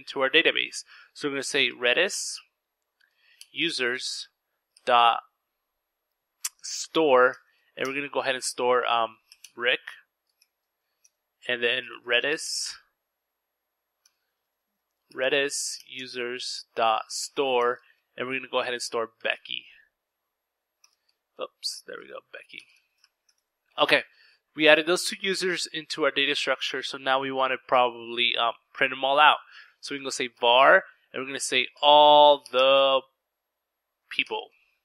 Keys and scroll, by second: 0.1-3.1 typing, 4.5-6.2 typing, 7.3-21.6 typing, 23.0 typing, 28.1-34.8 typing.